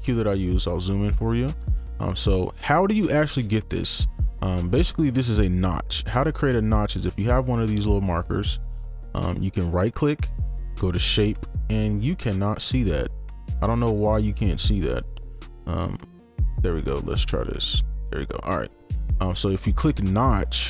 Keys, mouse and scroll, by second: 17.2 right click.